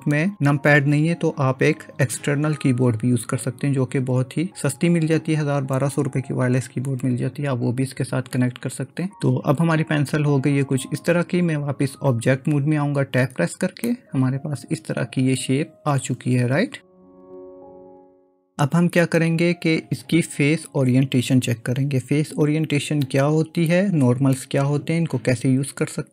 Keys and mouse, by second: 13.3 Tab, 13.9-19.0 middle drag.